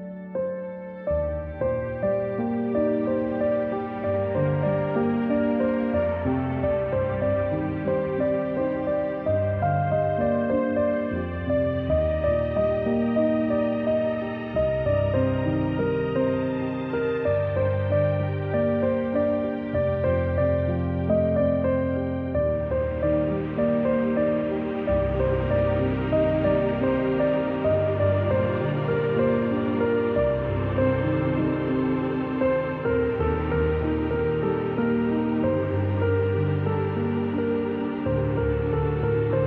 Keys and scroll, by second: 4.6 v, 8.6 ctrl+z, 9.5 a, 13.3 -, 15.0 a, 22.3 v, 25.1 a, 35.2 v, 36.2 a.